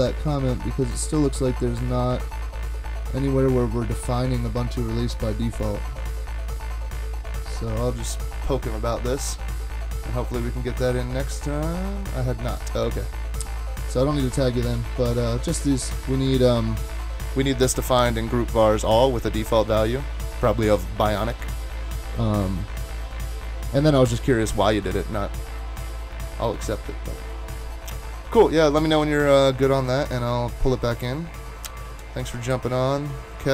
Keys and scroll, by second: 32.0 super+`, 32.5 super+`.